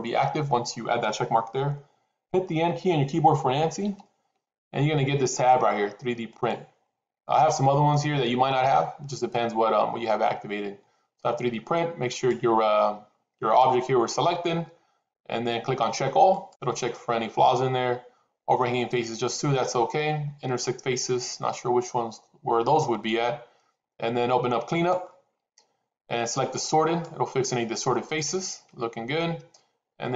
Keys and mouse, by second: 3.7 n, 6.2 click, 12.0 click, 24.7 click, 26.8 click.